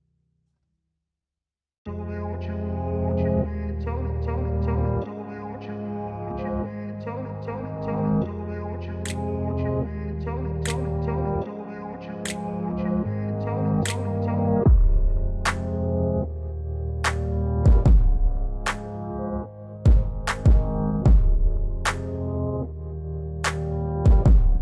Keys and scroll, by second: 21.8 alt+w.